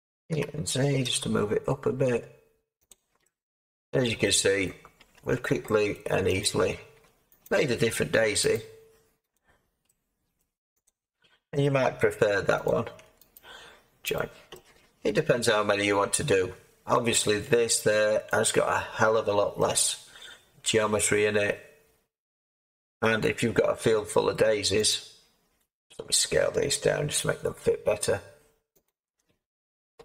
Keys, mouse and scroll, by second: 0.3 g, 1.0 z, 3.7 Tab, 4.6 Tab, 5.1 Tab, 27.1 Tab, 27.1 s.